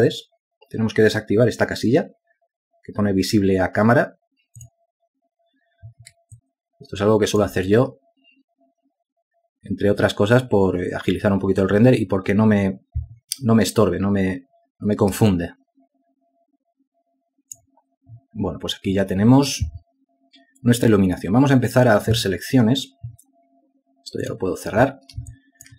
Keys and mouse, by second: 7.6 alt+click, 16.6 alt+click.